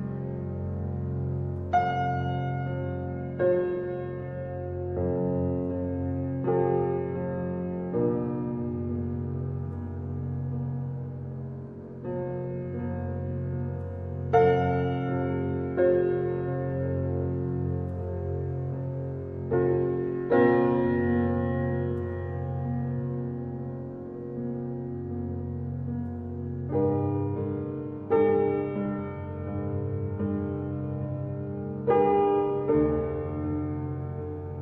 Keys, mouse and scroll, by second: 0.9 shift+a, 1.8 g, 3.4 g, 6.5 r, 12.9 click, 13.7 s, 18.1 g, 20.5 s, 22.3-25.1 middle drag, 25.1-34.6 drag.